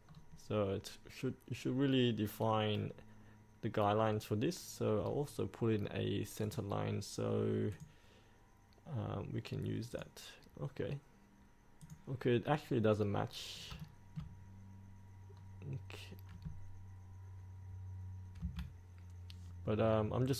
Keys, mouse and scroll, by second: 0.2 scroll down 1, 4.1-5.0 scroll up 1, 5.0-6.5 scroll down 1, 6.5 click, 10.8-11.9 scroll down 1, 11.9 click, 13.3 scroll up 1, 13.8-15.4 shift+middle drag, 15.4-18.4 scroll down 1, 18.4 F8, 19.5-20.3 scroll up 1.